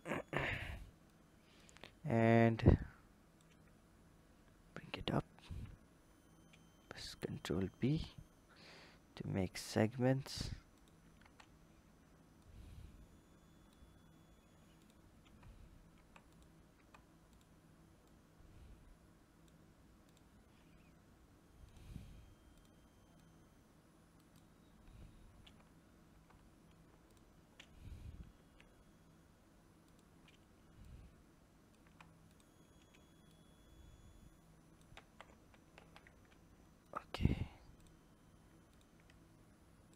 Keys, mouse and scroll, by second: 0.2 click, 0.8 click, 2.2 click, 4.1-5.3 scroll down 2, 5.3 ctrl+b, 11.0 Tab, 12.2 click, 14.1-14.5 scroll up 1, 14.5 click, 15.0 Tab, 15.7 Tab, 16.0 click, 16.5 Tab, 17.1 click, 17.8 click, 19.8 click, 21.5 click, 22.4 click, 23.0 click, 25.2 Tab, 25.9 Tab, 26.9 alt+click, 28.1 ctrl+b, 30.6 click, 31.7 Tab, 32.1 click, 33.1 click, 34.8 ctrl+z, 35.1 ctrl+z, 35.6 ctrl+z, 36.6 click, 37.6 alt+click, 38.4 click, 39.7 ctrl+click.